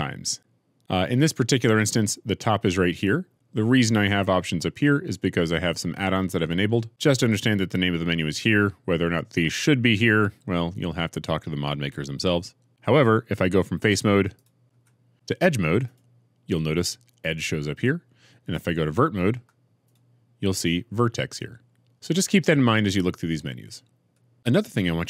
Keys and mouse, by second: 14.7 2, 15.8-17.3 right drag, 18.1-19.5 middle drag, 19.5 1, 19.7 right click.